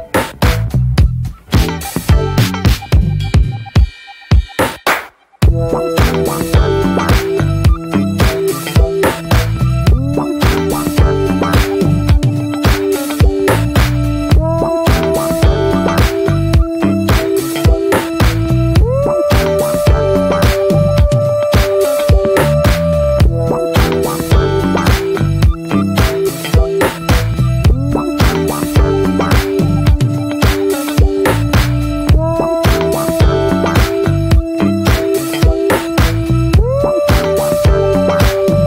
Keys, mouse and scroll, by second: 1.1-7.4 drag, 7.4-8.0 shift+middle drag, 8.0 click, 13.5 shift+a, 14.3 middle click, 14.8 click, 15.4 shift+a, 17.9 click, 19.3-19.7 scroll up 4, 19.7 ctrl+z, 20.1 scroll down 5, 20.4 click, 21.5 ctrl+x, 22.4 ctrl+z, 22.6-23.3 shift+drag, 23.3 ctrl+x, 24.3 click, 25.1 scroll down 4, 25.5-26.3 middle drag, 26.3 click, 26.4-26.9 scroll up 4, 26.6 middle drag, 27.1 ctrl+v, 28.0 scroll up 1, 28.1 click, 28.4-30.6 middle drag, 30.6 shift+a, 33.2 middle drag, 33.4-33.8 scroll up 1, 33.8 click, 34.1 shift+a, 36.0-38.6 drag.